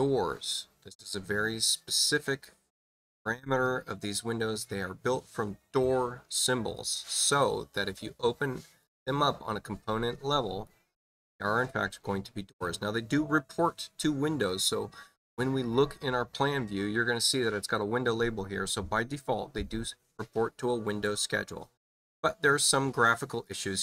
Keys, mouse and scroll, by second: 7.9 space, 8.7 click, 10.4 click, 14.4 click, 15.9 click.